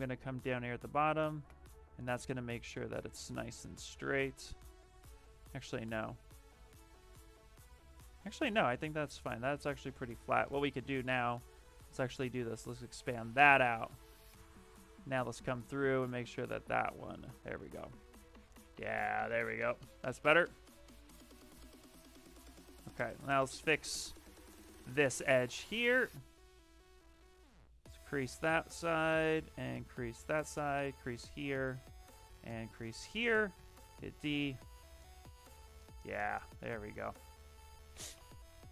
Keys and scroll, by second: 6.4 ctrl+z, 7.7 shift+f, 15.0 ctrl+shift+space, 18.1 shift+f, 20.1 d, 24.3 shift+d, 24.9 shift+f, 33.4 d, 34.0 shift+f.